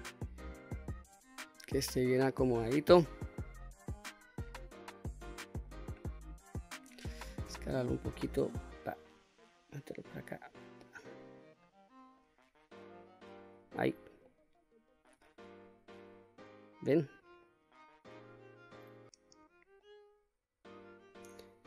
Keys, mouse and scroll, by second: 1.1-2.3 middle drag, 2.7 middle click, 3.1 scroll down 1, 3.3 middle click, 3.6-4.5 scroll down 4, 4.5 middle click, 5.6-6.2 scroll up 2, 6.2 middle click, 7.2 s, 8.5 click, 9.5-10.7 drag, 11.3 middle click, 12.6 click, 13.6-14.0 scroll up 1, 14.0 middle click, 15.2-15.6 scroll down 1, 15.6 middle click, 17.2-18.5 middle drag, 18.5-18.9 scroll down 1, 19.0-19.5 scroll up 1, 19.5-20.8 middle drag.